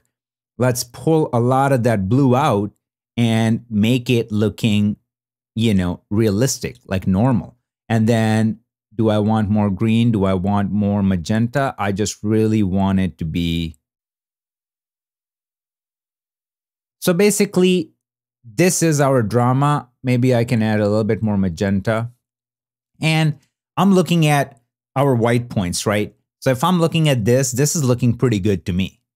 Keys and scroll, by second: 23.2 super+d, 25.3 super+=.